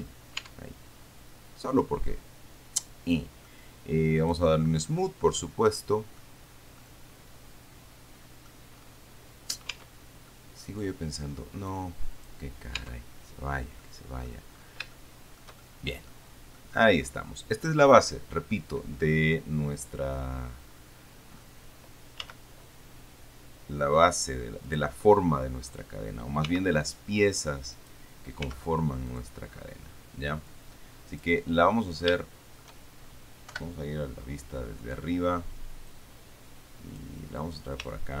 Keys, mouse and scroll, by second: 0.7 Tab, 1.3 scroll down 2, 2.1-3.9 drag, 4.5 click, 5.1 scroll up 1, 5.6-6.6 drag, 6.6-7.1 scroll down 1, 7.1-8.9 middle drag, 8.9-10.0 scroll up 1, 10.0 Tab, 10.6 click, 12.0 click, 13.0 Tab, 13.6-14.1 scroll down 1, 14.1 click, 14.7-15.1 scroll up 1, 15.2 shift+click, 15.2 shift+middle click, 15.9 shift+click, 16.0 shift+middle click, 16.6 scroll up 1, 16.8 middle click, 17.5 scroll up 1, 17.7-18.5 scroll down 1, 19.4-20.6 middle drag, 20.8-21.5 scroll up 1, 22.5 s, 24.9 click, 25.4-26.6 scroll down 1, 26.7 s, 28.0 click, 28.7 s, 29.4 click, 29.7-30.5 scroll up 1, 30.8 click, 32.0 middle click, 32.5 shift+middle click, 33.8 KP_7, 34.9-35.3 scroll up 2, 36.1-37.4 drag, 37.5-38.2 scroll down 1.